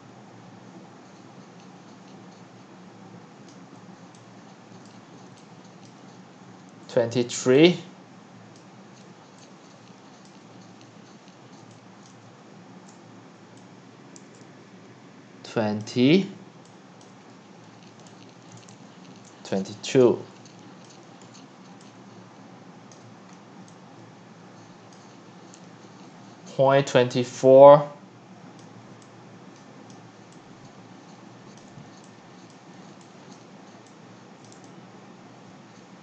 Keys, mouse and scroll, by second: 3.5-4.1 drag, 4.1-6.9 typing, 4.9 click, 5.9 drag, 6.2 right click, 8.5-9.1 drag, 9.1-10.3 x, 10.9 click, 11.6 x, 12.1 click, 12.2 q, 15.8-16.2 drag, 16.2-16.5 scroll down 3, 17.0 drag, 17.2 scroll down 1, 17.3 click, 18.0-19.2 typing, 18.6 click, 20.8 click, 21.2 scroll down 4, 21.7-24.9 typing, 22.9 click, 23.3-23.6 middle drag, 26.2 click, 26.2 click, 26.3 click, 26.6 click, 26.8 click, 27.2-36.0 typing, 28.6 click, 30.5-31.2 drag, 33.4 drag, 34.5 click.